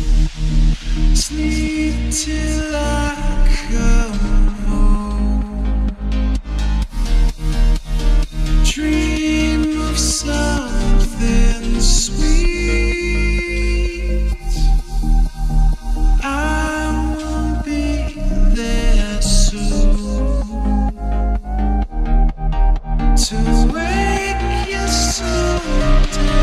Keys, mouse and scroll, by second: 0.4 click, 1.1 Tab, 1.9 click, 3.0 b, 3.8 s, 6.5 Tab, 8.0 s, 10.4 click, 10.5-11.2 scroll up 2, 11.2 click, 12.2 shift+d, 15.2 s, 18.8 s, 25.4-26.4 drag.